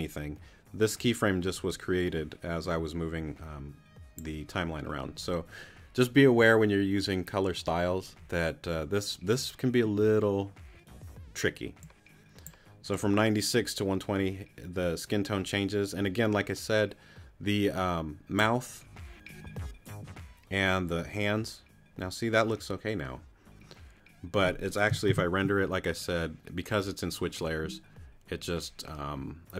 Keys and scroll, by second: 25.1 super+r.